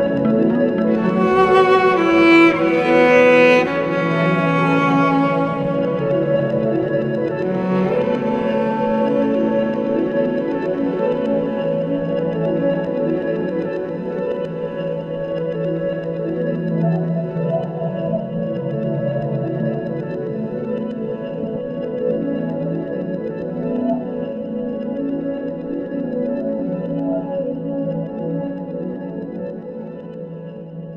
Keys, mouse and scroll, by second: 0.2 scroll, 0.4 click, 1.4 click, 3.2 ctrl+alt+middle click, 4.3 click, 6.1 ctrl+click, 7.6 ctrl+click, 9.1 ctrl+click, 11.1 alt+scroll, 14.1 alt+scroll, 14.7 ctrl+BackSpace, 17.6 ctrl+alt+middle click, 18.4-18.8 ctrl+alt+scroll, 19.8 click, 21.2 click, 22.6 scroll, 26.8 right click, 27.7 click, 28.9 click, 29.1 click, 29.6 click.